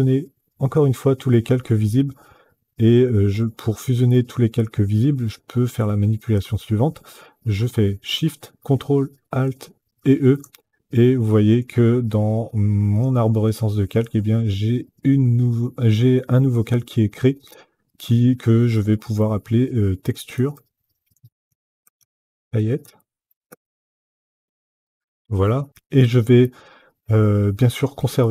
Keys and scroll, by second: 19.8-24.8 typing.